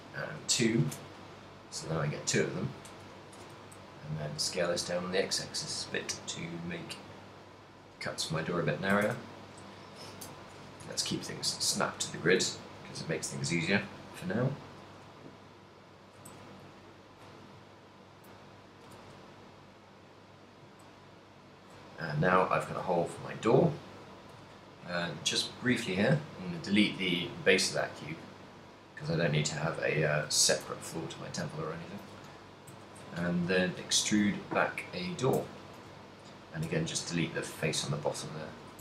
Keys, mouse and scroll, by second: 2.5 click, 3.6 s, 7.1 click, 10.1 shift+s, 10.8 KP_3, 11.9 ctrl+middle click, 12.2 a, 12.7 ctrl+r, 16.1 click, 16.3 shift+s, 17.7 ctrl+middle click, 19.0 g, 20.1 click, 20.3 middle click, 20.7 z, 21.2 middle click, 23.0 click, 23.6 middle click, 23.6 z, 24.7 ctrl+click, 26.2 x, 27.2 middle click, 28.9 right click, 29.1 right click, 29.7 middle click, 30.4 z, 31.0 middle click, 31.7 ctrl+middle click, 32.8 z, 33.5 KP_3, 34.3 e, 35.4 click, 35.9 a, 36.3 right click, 36.7 x, 38.1 middle click.